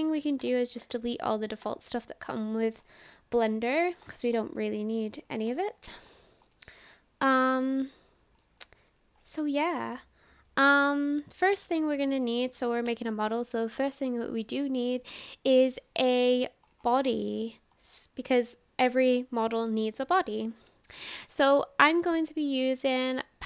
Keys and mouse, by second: 0.9-2.9 drag, 1.7 typing, 2.9-3.4 middle drag, 4.6-5.0 middle drag, 6.5-8.4 middle drag, 8.9 click, 9.5-9.9 middle drag, 18.6 middle click.